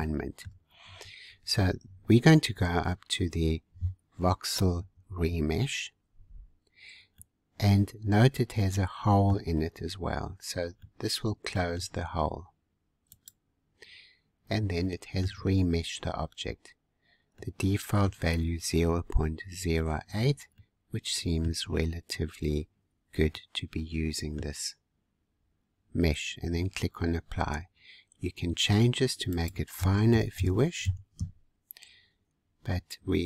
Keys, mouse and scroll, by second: 7.2-9.7 middle drag, 9.7-10.3 scroll up 2, 10.3-10.7 scroll down 2, 10.7-13.1 middle drag, 13.1-14.4 drag, 14.4-15.7 middle drag, 15.7-17.3 scroll up 1, 17.3-20.4 middle drag, 20.6-24.9 middle drag, 24.9-25.3 scroll down 2, 28.0 scroll up 2, 29.3-32.3 drag, 32.4-32.9 scroll up 1.